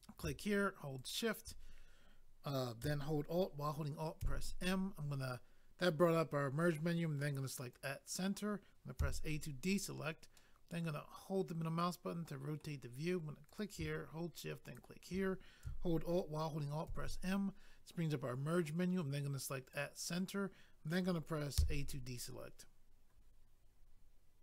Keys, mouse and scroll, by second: 0.0 click, 1.0 shift+click, 1.1 shift+click, 4.2 alt+m, 7.7 click, 7.9 click, 9.0 a, 10.4 middle click, 13.5 click, 13.6 click, 14.6 shift+click, 14.7 shift+click, 16.8 alt+m, 19.6 click, 19.7 click.